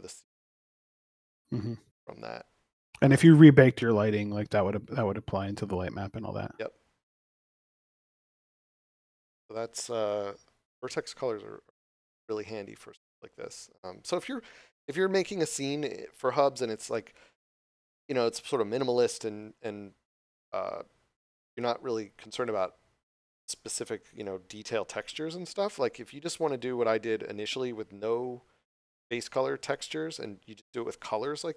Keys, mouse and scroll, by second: 4.1 middle click, 5.4 scroll down 1.